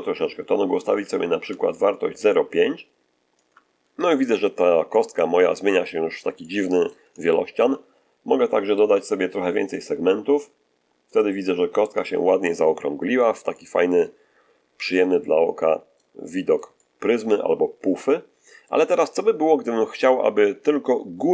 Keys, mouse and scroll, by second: 4.8-7.0 middle drag, 7.1-7.7 shift+middle drag, 9.6-12.1 drag, 13.4-16.1 middle drag.